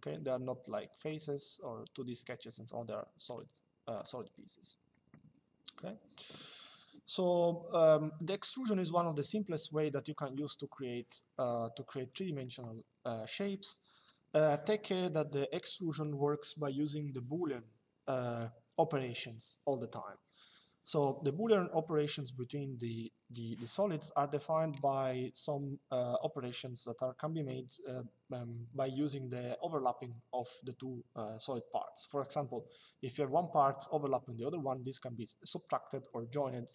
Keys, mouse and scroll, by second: 0.7 click, 3.0 click, 11.6 middle click.